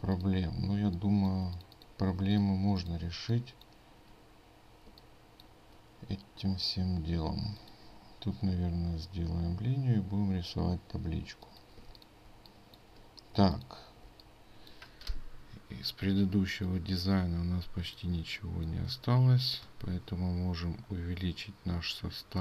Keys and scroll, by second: 2.2 ctrl+space, 11.8 ctrl+space.